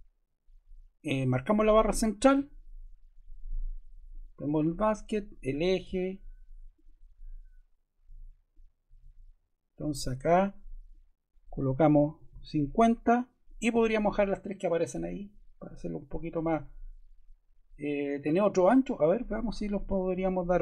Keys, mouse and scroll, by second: 4.0 click, 5.1 click, 11.9-12.7 typing.